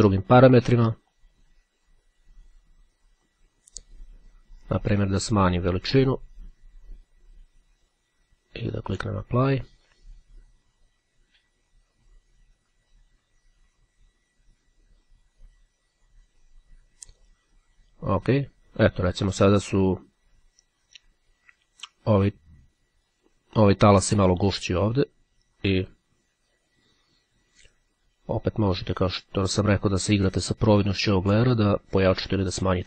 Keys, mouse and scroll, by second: 1.3 click, 2.5-4.5 drag, 4.7-6.3 drag, 8.8 click, 17.3 click, 25.9 click, 28.3-32.8 drag.